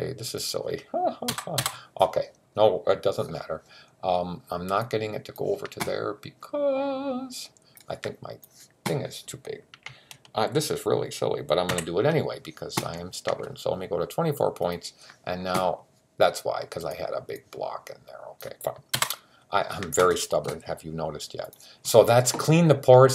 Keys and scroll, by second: 11.5 super+t.